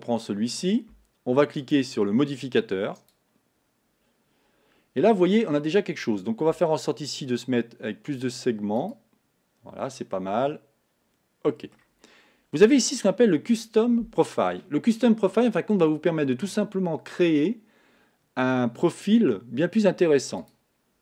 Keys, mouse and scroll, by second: 3.2-10.1 drag, 10.1-12.8 middle drag, 12.8 click, 16.8-20.8 middle drag, 20.8 click.